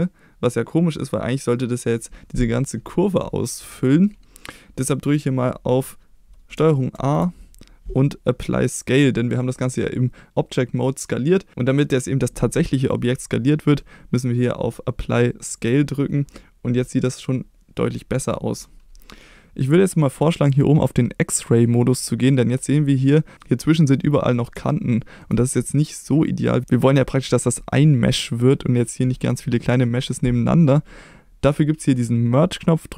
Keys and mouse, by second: 6.9 ctrl+a, 24.6-25.2 shift+middle drag.